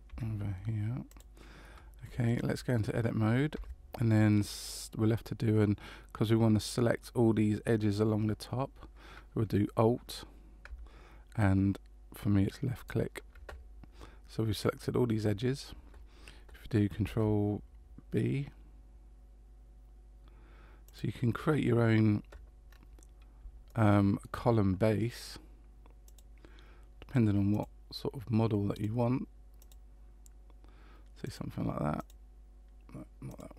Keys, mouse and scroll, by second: 2.2 shift+middle click, 3.5 Tab, 12.7 alt+right click, 17.1 ctrl+b, 22.7-23.4 scroll up 2, 23.7 shift+middle click, 26.0 click, 28.7 click, 31.2 click, 33.3 click.